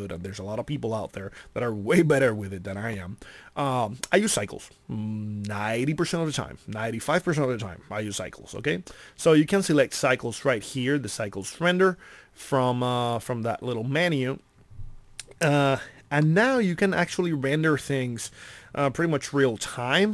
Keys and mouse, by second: 10.3-13.3 drag, 16.4-17.8 middle drag.